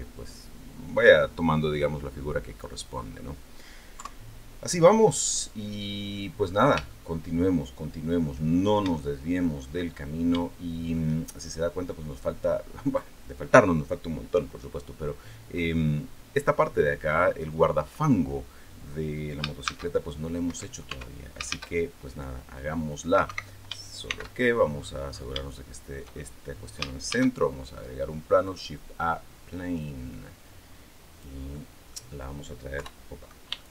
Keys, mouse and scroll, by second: 1.8-2.3 scroll down 2, 2.3 middle click, 3.8 KP_3, 5.2-5.6 scroll down 2, 6.2-6.7 scroll up 3, 6.7-8.0 shift+middle drag, 8.3 shift+scroll down 2, 8.8 shift+middle click, 9.7 shift+scroll up 1, 10.2 shift+middle click, 19.4 shift+a, 20.3 Escape, 20.7 Tab, 21.3 shift+a, 23.1 Escape, 23.9 shift+c, 24.6 scroll up 2, 25.1 shift+scroll up 2, 25.3 shift+middle click, 26.0 shift+scroll down 2, 26.9 shift+a, 28.2 click, 29.6-31.2 drag, 31.3 middle click, 32.6 KP_3, 33.4 shift+middle click.